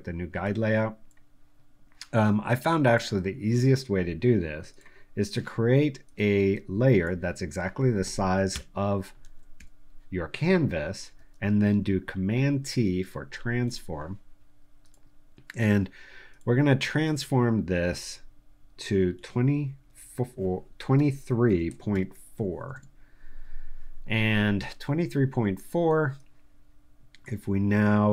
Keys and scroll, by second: 8.5 super+BackSpace, 9.2 super+d, 9.5 super+v, 10.4 v, 12.4 super+t, 19.1 2, 19.7 4, 20.9 BackSpace, 21.4 3, 21.9 4, 23.7 Return.